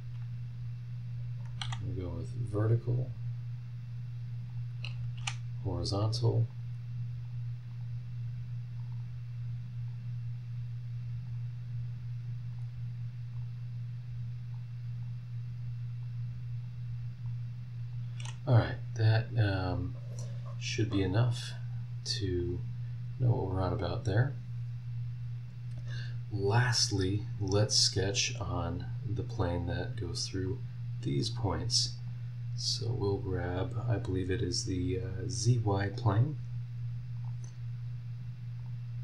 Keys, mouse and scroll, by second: 1.4 click, 1.6 v, 2.6 click, 4.5 click, 5.1 h, 6.5 click, 7.2 click, 7.7 click, 8.8 click, 9.9 click, 11.2 click, 12.5 click, 13.3 click, 14.5 click, 16.0 click, 17.2 click, 20.3-20.6 scroll down 1, 20.8-21.4 scroll up 2, 22.4 click, 23.0 scroll down 1, 23.8 scroll down 1, 24.7 scroll up 1, 29.7 click, 30.4 click, 31.2 click, 32.0 click, 37.1 click, 37.4-38.6 middle drag, 38.6 click, 38.8 middle click.